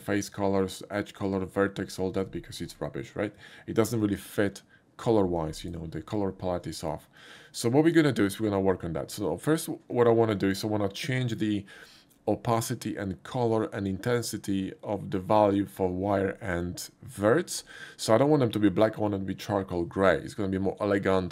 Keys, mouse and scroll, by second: 2.7 Tab, 4.0 click, 5.6 click, 7.2 click.